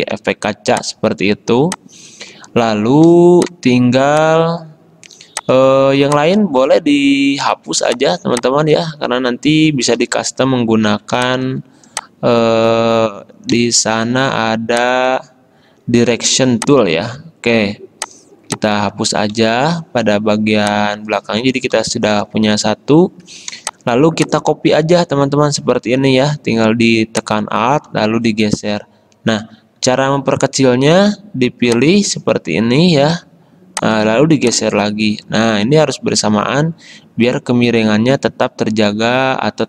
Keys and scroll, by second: 0.2 ctrl+z, 1.5 space, 3.3 space, 8.1 space, 10.1 Delete, 11.3 space, 13.6 Delete, 19.4 Delete, 21.8 Delete, 23.7 space, 30.2 a.